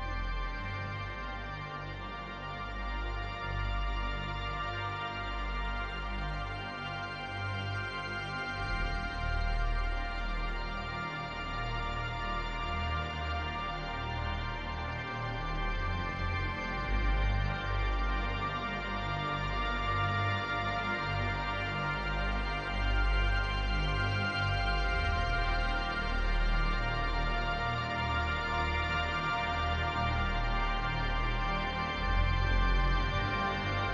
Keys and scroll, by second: 3.9 space, 5.9 space, 12.1 ctrl+z, 15.0 space, 17.2 space, 20.2 space, 26.5 space, 27.8 space.